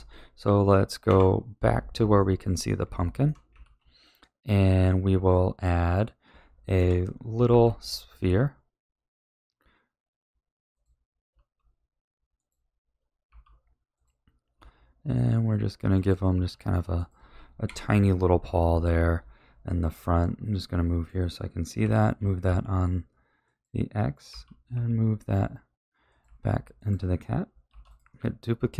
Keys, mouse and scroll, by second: 1.0 KP_Divide, 2.1-3.6 middle drag, 3.6 ctrl+s, 4.1-6.7 middle drag, 6.7 KP_3, 7.4 shift+a, 11.3 s, 13.2 g, 14.5 s, 16.3 g, 17.6 KP_1, 20.0-21.8 middle drag, 21.8 g, 24.2 g, 26.2 a, 26.7 click, 27.7 shift+d.